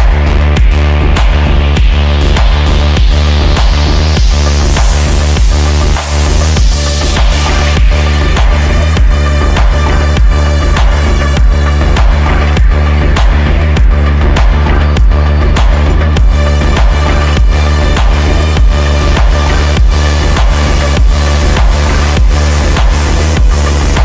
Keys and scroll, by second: 13.7 Delete, 19.9 shift+F2, 20.7 F9, 23.0 F9, 23.4 F3, 23.8 Escape.